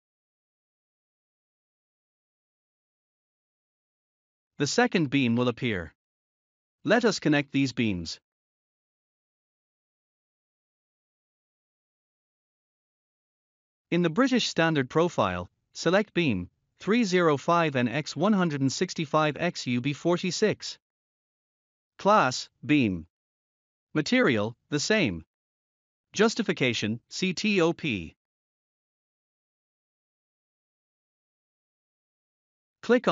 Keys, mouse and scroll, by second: 1.3 6, 5.8 Return, 7.8 scroll down 1, 9.5 scroll up 1, 11.7 scroll down 1, 13.2 scroll down 1, 17.0 click, 17.6-18.7 scroll up 1, 19.7 click, 21.9 click, 22.5-23.6 scroll up 1, 23.6 click, 28.0 click, 30.3 click, 31.2 scroll up 1, 32.5 scroll up 1.